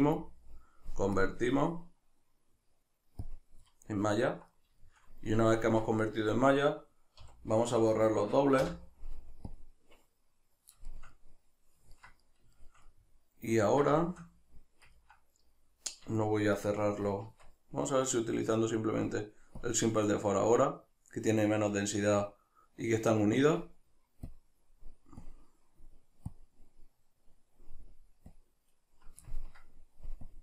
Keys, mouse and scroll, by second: 3.7-19.0 middle drag, 5.7 Tab, 17.3 Tab, 19.0-29.4 drag, 29.4 ctrl+middle click, 30.3-30.4 drag.